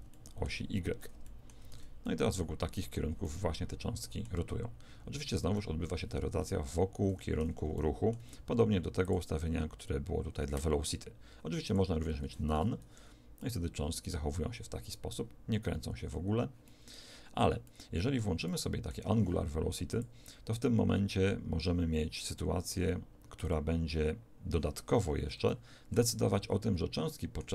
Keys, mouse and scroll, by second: 1.7 alt+a, 7.0 Escape, 9.0-11.4 drag, 12.5 alt+a, 15.1-19.9 middle drag, 19.0 Escape, 19.9 click, 25.4-27.5 middle drag.